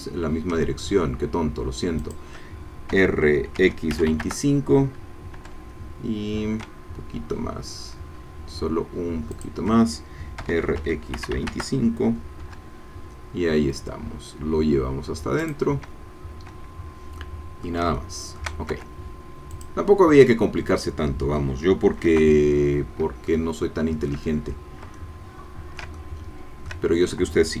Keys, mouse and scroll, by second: 2.0 shift+click, 2.9 r, 3.6 x, 3.9 KP_2, 4.1 KP_5, 4.2 KP_Enter, 5.3 e, 9.3 shift+click, 10.4 r, 10.8 x, 11.2 KP_2, 11.3 KP_5, 11.5 KP_Enter, 12.4 e, 15.4-17.2 drag, 17.2 middle click, 18.0 shift+middle click, 18.7 shift+Tab, 19.5-20.9 drag, 22.1 KP_0, 23.3-24.9 shift+middle drag, 24.9 ctrl+click, 25.0 ctrl+middle click, 25.9 ctrl+shift+click, 25.9 ctrl+shift+middle click.